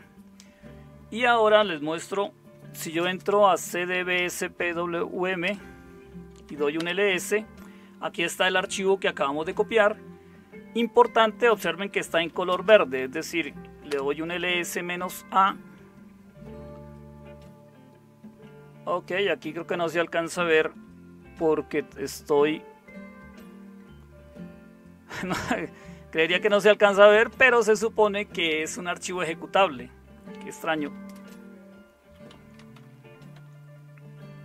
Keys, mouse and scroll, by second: 2.5-7.1 typing, 11.9-13.7 typing, 13.8 Return, 30.5-33.3 typing.